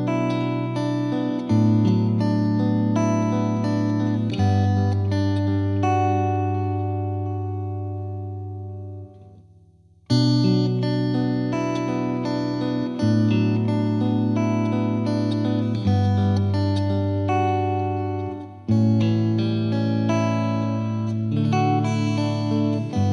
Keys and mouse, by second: 0.2 click, 2.1-3.2 drag, 6.1-7.2 drag, 7.4-8.5 drag, 10.2 click, 14.2 right click, 14.2 click, 15.9 click, 17.5 click.